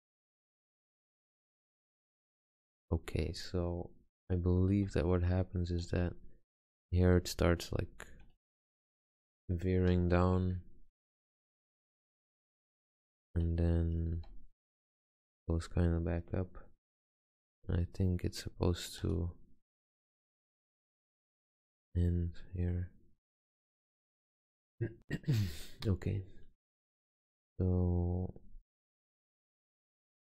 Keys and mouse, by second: 0.4 Tab, 4.9 g, 6.1 e, 7.2 g, 8.3 click, 8.4 r, 9.1 click, 9.3 g, 11.8 g, 12.7 click, 13.5 e, 14.3 g, 15.0 r, 17.8 g, 19.2 e, 20.5 g, 21.3 r, 23.7-24.7 middle drag.